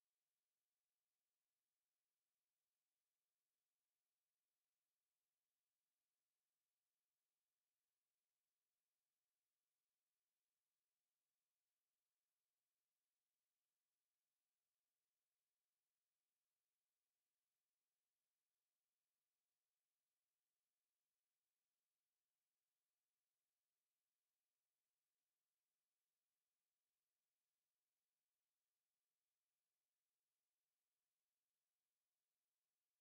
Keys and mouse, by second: 26.8 f, 27.5 alt+click, 28.8 click, 29.9 alt+click, 30.8 click.